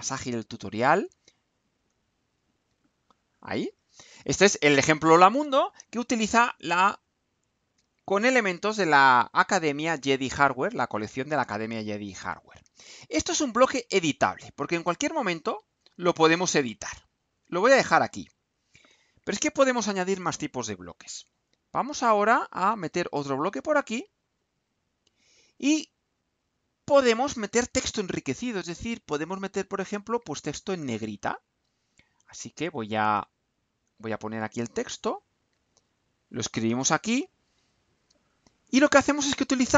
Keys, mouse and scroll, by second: 0.6 ctrl+c, 1.5 click, 2.3 ctrl+v, 3.7 click, 7.0-8.3 drag, 14.4-15.9 drag, 16.4-18.4 drag, 18.8 click, 22.9 click, 24.9 click, 26.1-27.3 drag, 33.5-34.9 drag, 35.5 ctrl+c, 36.9 click, 37.6 ctrl+v.